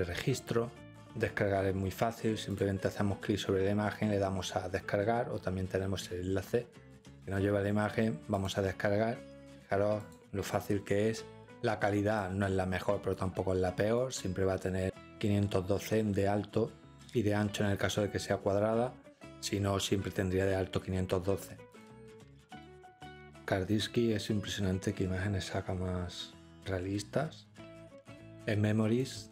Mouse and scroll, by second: 2.5 click, 8.4 click, 10.0 click, 10.7 click, 12.1-13.1 drag, 14.0 click, 27.9 click, 29.0 scroll.